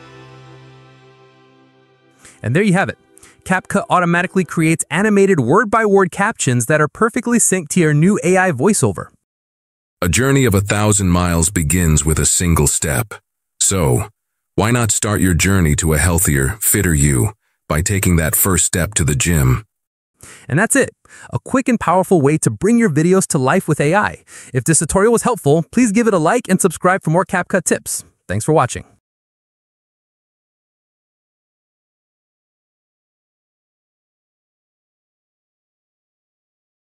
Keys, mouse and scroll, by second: 5.1-6.1 drag, 8.7-10.0 drag, 10.0 space, 20.1 space.